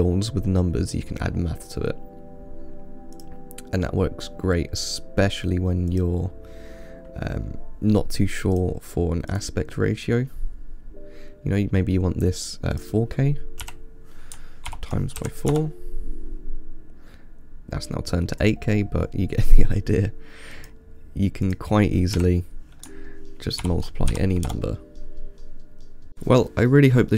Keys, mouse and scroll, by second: 3.4 click, 6.2 click, 8.8 click, 9.6 click, 13.0-16.0 drag, 18.7-20.9 drag, 21.7-24.8 drag.